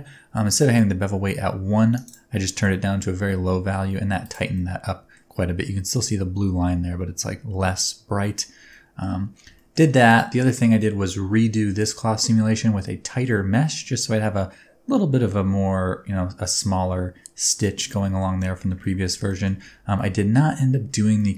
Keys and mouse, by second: 0.7-2.1 drag, 2.7-3.7 middle drag, 4.2 click, 4.5 middle click, 8.0 Tab, 8.7 middle click, 9.5 shift+middle click, 10.8 middle click, 12.8-13.2 middle drag, 17.9 middle drag, 18.3 shift+middle drag, 18.8 ctrl+middle drag, 19.2 shift+middle drag, 19.6 Tab, 19.9 middle click, 21.1 middle click.